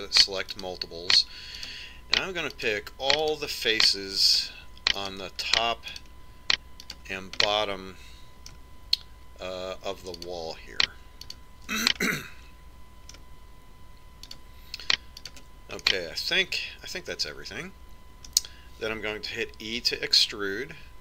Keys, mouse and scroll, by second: 8.0-9.8 middle drag, 10.8-13.6 right drag, 13.6 middle click, 14.9-17.6 right drag, 16.8 click, 17.6 middle click, 20.4 e.